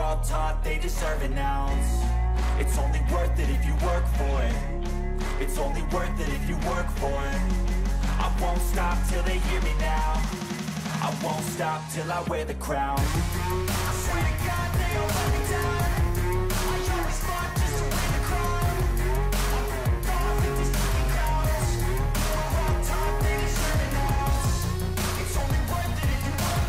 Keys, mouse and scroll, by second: 7.6 click, 20.6-23.0 [.